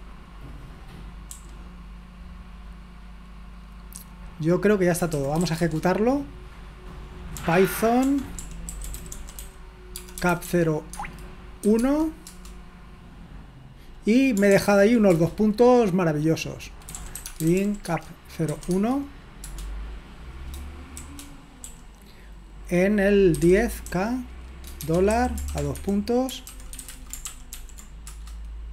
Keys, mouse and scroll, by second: 0.0-1.5 typing, 5.2-5.9 typing, 7.4-12.3 typing, 11.8 Tab, 14.5 ctrl+p, 15.1 Return, 16.7-18.5 typing, 18.7 Tab, 21.7 k, 23.1-27.4 typing, 26.3 Escape, 27.6 ctrl+p, 28.2 Return.